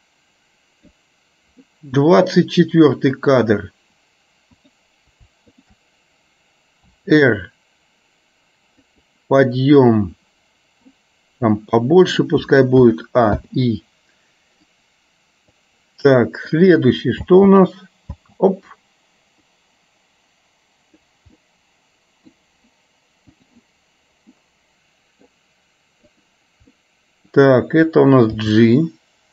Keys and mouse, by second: 1.8 middle click, 3.3 click, 5.6 shift+click, 7.1 r, 11.1-12.4 middle drag, 13.5 i, 14.9-15.9 drag, 16.6 click, 17.4 space, 18.3 space, 19.8-21.1 drag, 21.4-22.4 middle drag, 23.5 click, 24.4 middle click, 26.3 click, 26.8 middle click, 28.5 g.